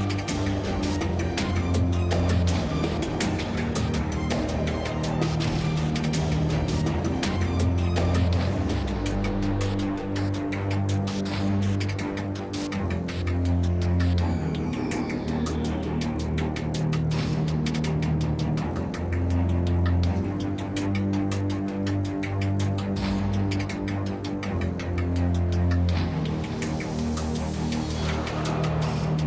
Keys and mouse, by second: 0.0-1.8 typing, 0.4 KP_Divide, 3.6-4.0 drag, 5.1-5.5 drag, 6.0-7.9 drag, 8.2 r, 10.4 Tab, 10.7 Tab, 10.9 Tab, 11.0 Tab, 11.2 Tab, 11.6 ctrl+l, 11.7 x, 12.4 Tab, 13.5 z, 13.9 z, 17.6 z, 17.7 a, 19.0-20.2 typing, 21.3-21.6 middle drag, 21.6 Tab, 22.0-23.0 typing, 23.8 Tab, 24.7 KP_Divide, 24.9 Tab, 25.0 Tab, 25.2 alt+c, 25.5 Tab, 26.4 KP_1, 26.8 ctrl+Tab, 27.2 alt+right click.